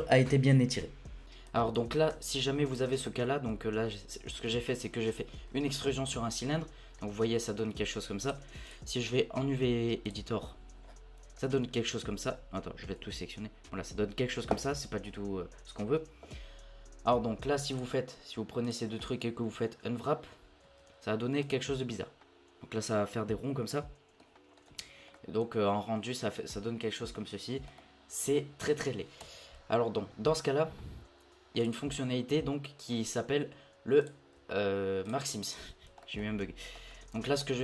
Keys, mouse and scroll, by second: 1.2 middle click, 1.4-2.1 drag, 2.1 Tab, 2.3-2.7 scroll down 1, 2.7-3.2 middle drag, 3.2 scroll up 2, 3.5 Tab, 3.8-6.3 middle drag, 6.3 Tab, 7.0-8.2 middle drag, 8.2-10.9 drag, 10.9-11.4 scroll down 7, 11.4 middle click, 11.7-12.8 scroll up 1, 12.8 l, 17.7 alt+click, 18.6 alt+shift+click, 19.0-20.6 middle drag, 20.6 u, 23.7 middle click, 24.5 scroll up 1, 24.8 Tab, 25.1-29.2 middle drag, 29.2 Tab, 31.6-34.0 drag, 35.0 shift+click, 36.0 shift+middle click, 36.9-37.4 scroll down 4, 37.4 shift+middle click.